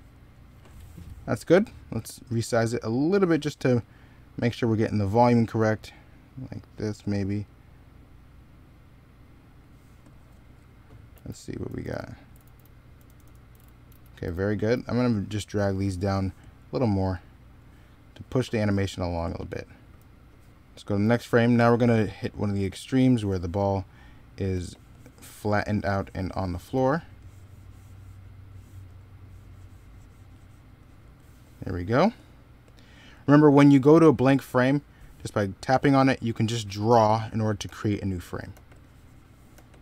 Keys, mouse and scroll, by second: 0.4 s, 11.0-14.6 typing, 19.8 x, 20.6 x, 24.4 e, 26.6 b, 35.9 middle click, 36.8 e, 37.5 b, 38.4 e, 39.4 b.